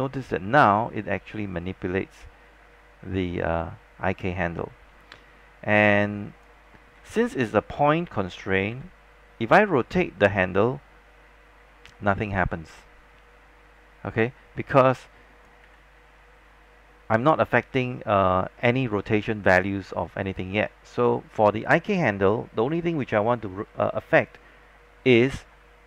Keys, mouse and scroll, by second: 7.1 z, 8.8 e, 9.8-15.7 drag, 15.7 z, 16.1-21.7 scroll up 1.